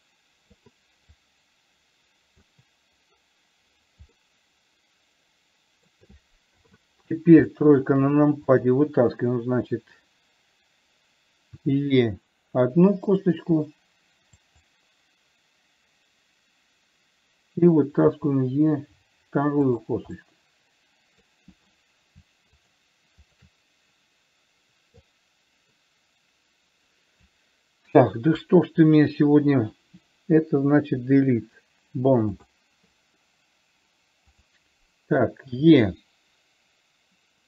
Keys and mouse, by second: 0.0 click, 0.3 click, 1.5-2.8 drag, 4.5-6.1 middle drag, 6.9 KP_3, 7.9 middle click, 8.8 click, 11.9 e, 18.5 e, 20.5-21.5 middle drag, 22.9 shift+click, 23.5 shift+click, 25.4-27.6 drag, 28.6 KP_3, 31.4 Delete, 34.8 click, 35.9 e.